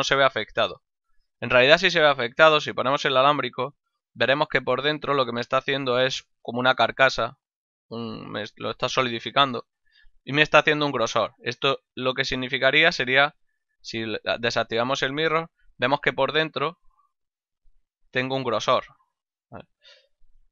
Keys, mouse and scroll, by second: 0.0 click, 2.7 z, 4.6 click, 13.0 click, 13.5 z, 14.8 middle click, 15.9 ctrl+middle click, 17.5 click.